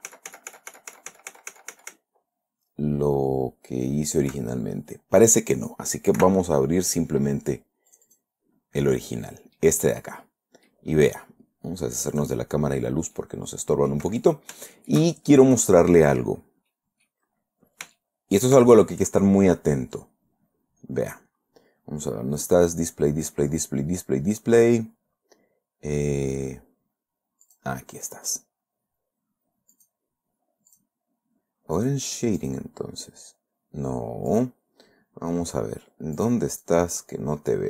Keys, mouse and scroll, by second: 6.6 ctrl+o, 8.3 click, 9.5-9.8 scroll up 2, 10.0 middle click, 10.6 scroll up 2, 11.0 middle click, 12.5 click, 13.0 scroll down 2, 13.5 middle click, 14.3 scroll down 2, 14.5-14.8 scroll up 2, 15.1-16.1 shift+middle drag, 16.7-17.1 scroll down 2, 17.1 middle click, 17.7-18.0 scroll up 2, 18.4 shift+middle click, 20.3-21.4 scroll down 6, 21.8-22.2 scroll up 2, 24.7-25.3 scroll down 4, 27.8 click, 28.3 click, 30.1 click, 31.1 click, 32.2 click, 32.8 click, 34.7 click, 36.6 click, 36.9 click.